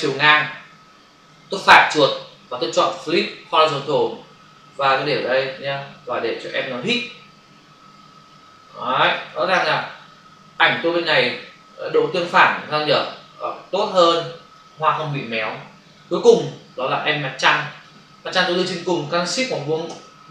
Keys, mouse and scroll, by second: 1.6 right click, 3.4 click, 5.1 click, 7.9 shift+click, 9.6 Return, 11.3 click, 17.3 click, 17.7 click, 17.8 double click, 19.9 ctrl+shift+].